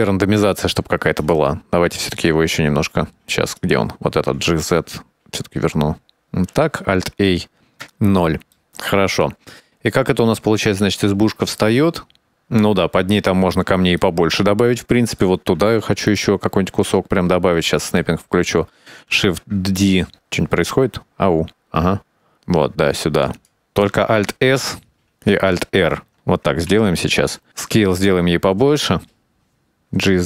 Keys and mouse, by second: 2.5 right click, 4.3 g, 7.1 alt+a, 7.9 KP_0, 8.6-9.1 shift+middle drag, 9.5 click, 10.7-12.3 drag, 14.6-15.8 shift+middle drag, 16.7-17.1 right drag, 18.5 click, 24.6 alt+s, 26.8 alt+r, 27.5 s, 30.1 g.